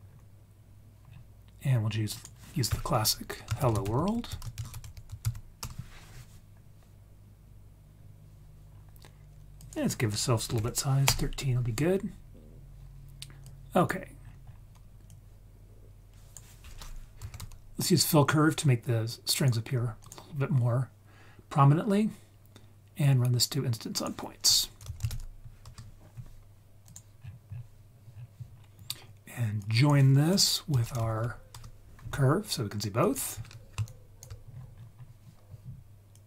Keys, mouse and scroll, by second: 0.0-1.0 scroll up 1, 1.0-2.1 scroll down 1, 2.1 click, 2.1-2.7 scroll down 1, 3.9 l, 7.9-8.7 scroll down 2, 8.7-9.5 scroll up 1, 9.5-11.0 drag, 9.5-10.1 scroll up 1, 12.7-13.4 scroll down 1, 13.4-13.9 drag, 13.4-13.9 scroll down 1, 14.2-15.0 scroll up 2, 15.0-19.4 drag, 15.0-15.4 scroll up 1, 20.0 drag, 20.3-20.7 scroll down 2, 21.7-23.0 scroll up 2, 23.0-25.6 drag, 26.8 drag, 27.2-28.1 scroll down 4, 28.1-28.5 scroll down 2, 28.5-29.4 scroll up 2, 29.5-31.5 drag, 33.0 click, 33.8 ctrl+right click, 34.4-35.4 scroll up 5, 36.1-36.2 drag.